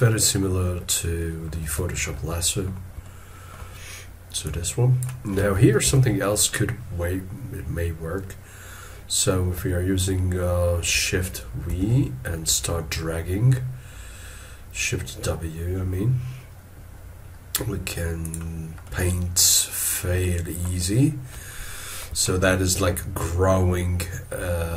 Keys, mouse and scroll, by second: 1.2 ctrl+middle click, 1.9 shift+middle click, 3.0 ctrl+middle click, 5.9 ctrl+z, 11.7 shift+w, 18.9 middle click, 22.2 shift+middle click, 22.8 scroll down 1.